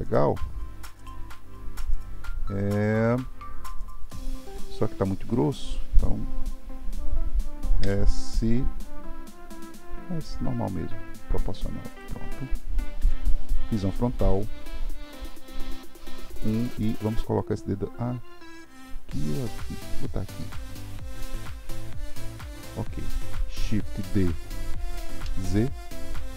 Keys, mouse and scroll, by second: 4.1-7.2 middle drag, 13.0 KP_1, 15.4 g, 24.7 shift+d.